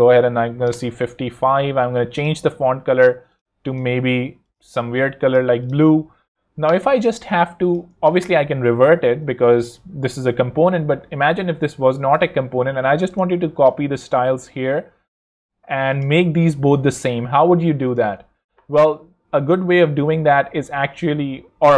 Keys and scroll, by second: 0.6 Home, 8.3 super+r, 8.4 e, 9.2 Escape.